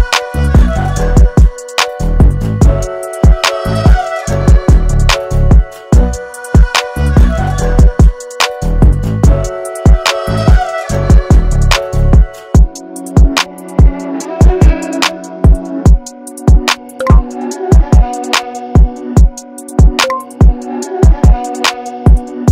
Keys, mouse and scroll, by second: 5.0 click, 15.2 click.